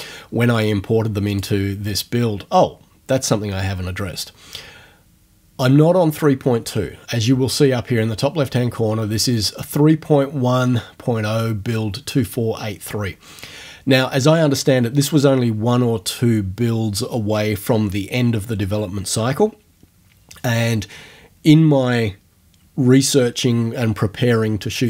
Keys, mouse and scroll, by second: 1.4 click.